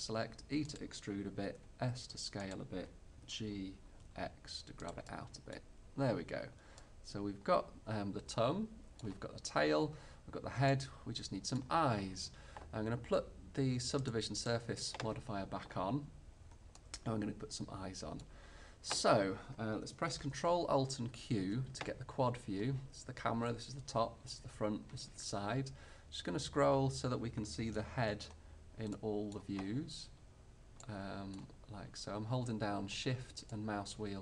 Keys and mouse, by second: 1.6 s, 3.2 g, 4.6 click, 5.1-6.5 drag, 8.8-11.0 middle drag, 16.5 middle click, 17.0 middle click, 17.2-20.8 middle drag, 20.8 ctrl+alt+q, 33.6-34.2 middle drag.